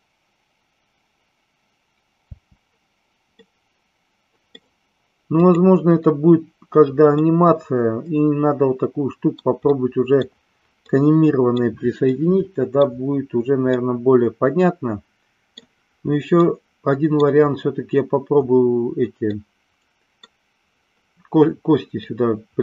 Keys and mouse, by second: 2.3 space, 3.3-4.5 middle drag, 5.3 click, 7.2-9.4 middle drag, 9.8-10.3 middle drag, 10.9-11.6 middle drag, 12.3 middle click, 13.8-15.8 middle drag, 16.4-17.3 middle drag, 19.5 middle click, 22.2-22.6 middle drag.